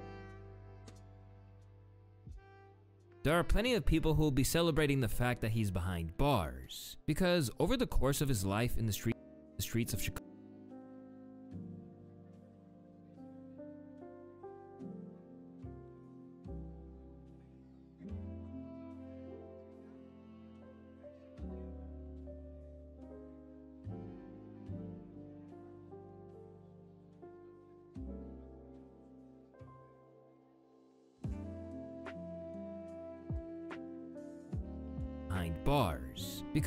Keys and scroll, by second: 0.6 ctrl+a, 1.3 F2, 8.7 space, 9.3 space, 9.8 space, 10.6 u, 13.8 ctrl+d, 14.8 u, 17.8 u, 22.0 4, 31.1 ctrl+z, 31.9 ctrl+z, 32.3 ctrl+z, 33.9 ctrl+shift+z.